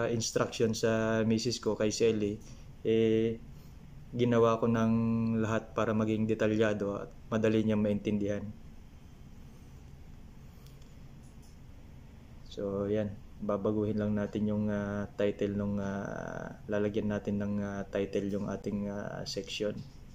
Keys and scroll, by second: 18.9 ctrl+v.